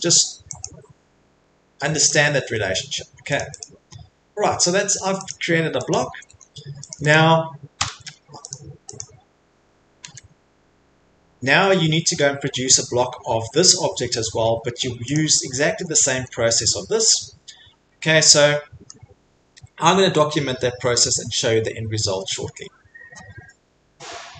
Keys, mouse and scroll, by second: 0.6 click, 2.0 click, 2.3 Escape, 2.5 Escape, 3.0 Escape, 3.1 middle click, 3.4 click, 3.6 click, 3.9 middle click, 4.0 middle click, 5.3 click, 5.9 click, 6.1 Escape, 6.3 Escape, 6.4 middle click, 6.5 middle click, 6.9 click, 7.1 click, 7.4 middle click, 7.8 Delete, 8.5 click, 8.9 click, 10.0 Escape, 11.1 middle click, 11.5 middle click, 12.2 middle click, 14.4 middle click, 14.4 middle click, 15.1 click, 15.3 click, 15.6 middle click, 15.7 middle click, 15.7 Escape, 16.4 middle click, 16.8 middle click, 16.8 middle click, 17.9 middle click, 17.9 middle click, 18.9 middle click.